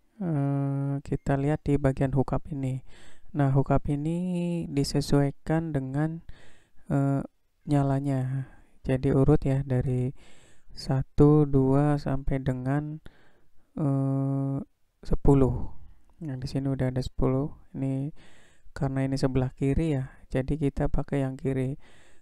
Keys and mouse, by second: 0.7 click, 4.7-6.7 drag, 7.9-9.4 drag, 10.6-17.5 drag.